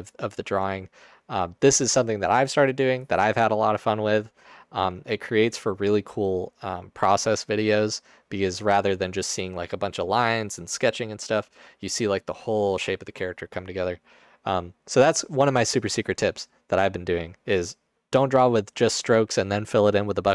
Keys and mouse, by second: 4.4-5.4 middle drag.